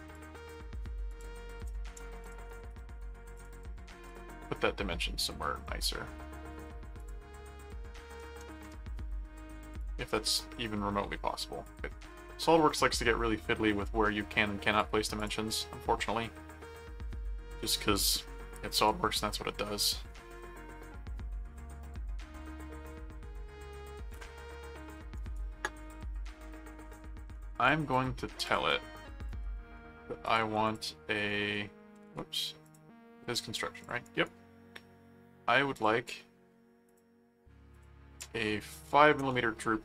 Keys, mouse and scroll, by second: 1.1 click, 2.2 click, 2.5 right click, 3.3 click, 4.0 click, 7.0 click, 9.8-14.8 drag, 15.1 click, 18.1 click, 19.8 click, 25.1 right click, 27.6 right click, 28.5 click, 29.2 click, 30.2 alt+click, 30.4 alt+c, 31.3 right click, 32.6 click, 33.8 click, 34.0 right click, 35.7 click, 36.9 click, 37.7 click.